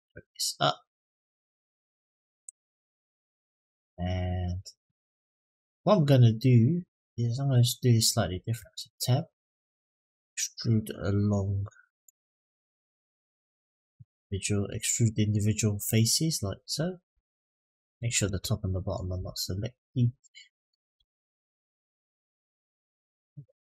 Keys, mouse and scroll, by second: 0.6-1.9 drag, 2.9-4.0 middle drag, 4.5 middle click, 8.4 Tab, 11.8-14.0 drag, 14.8 middle click, 15.6-16.9 drag, 17.0 ctrl+z, 17.3 middle click, 17.9 shift+click, 18.3 middle click, 19.4 shift+click, 19.9 middle click, 20.9 shift+click, 22.3 click, 23.0 shift+click, 23.3 shift+click.